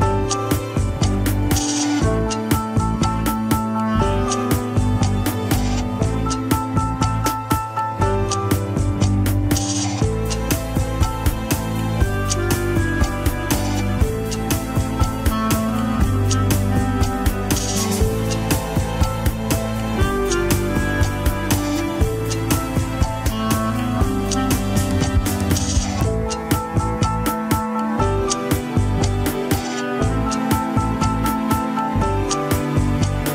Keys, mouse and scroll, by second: 0.6 alt+z, 1.7 shift+s, 2.2 Tab, 2.7 Tab, 2.9 click, 3.5 Tab, 4.0 r, 5.6 Tab, 5.8 scroll down 2, 6.6 shift+a, 7.7 click, 8.3 click, 8.8 click, 9.8 click, 10.2 x, 10.6 shift+a, 12.9-13.9 scroll down 12, 13.9 Tab, 14.1 s, 15.3 scroll up 2, 15.7 r, 16.9 scroll up 1, 17.3 Tab, 17.9 Tab, 18.1 s, 19.2 scroll up 3, 19.6 g, 22.5 g, 23.3 KP_3, 23.7 g, 25.1 KP_1, 26.2 g, 30.2 click, 31.1 scroll up 2, 31.3 r, 32.9 click.